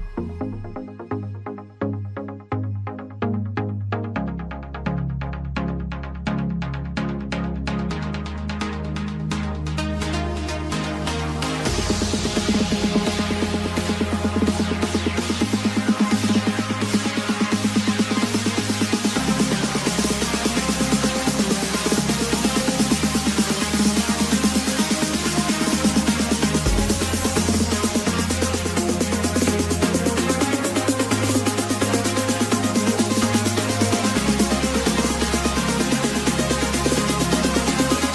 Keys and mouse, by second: 0.6 click, 2.0 click, 5.8 click, 6.8 click, 15.1 click, 18.1 click, 19.9 click, 21.3 click, 21.9-23.7 typing, 22.8 click, 25.6 click, 25.8 click, 27.2 click, 28.3 click, 31.3 click, 35.6 KP_3, 35.9 Return, 37.6 Return, 37.9 click.